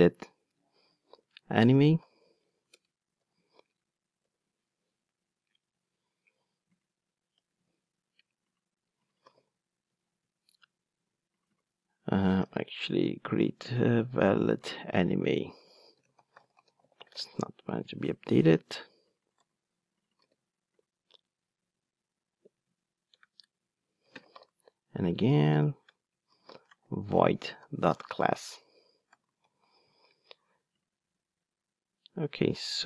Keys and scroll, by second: 1.3 Return, 2.7 alt+Return, 9.9 Return, 19.4 super+c, 20.3 super+v, 27.2 Return, 29.3 alt+super+l.